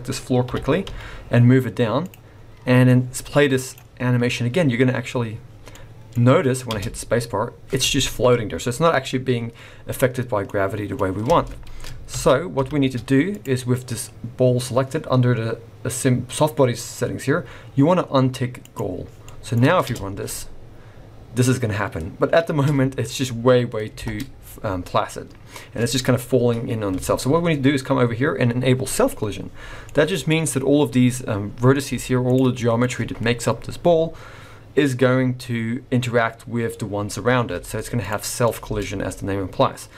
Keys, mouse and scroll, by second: 0.4 g, 2.9 click, 5.7 middle click, 6.7 space, 7.7-8.7 scroll down 1, 10.5 middle click, 11.3 space, 12.1 ctrl+z, 12.6 ctrl+z, 13.3 click, 14.3-15.2 scroll up 1, 18.6 click, 19.3 middle click, 19.8 space, 22.5 space, 23.9 shift+Left, 25.0 scroll up 1, 29.0 click, 29.8 middle click, 30.2-31.0 scroll up 2, 31.0-31.8 scroll up 2, 31.8 z, 32.5 middle click, 37.5 z, 38.3-38.6 scroll down 3, 38.6 space.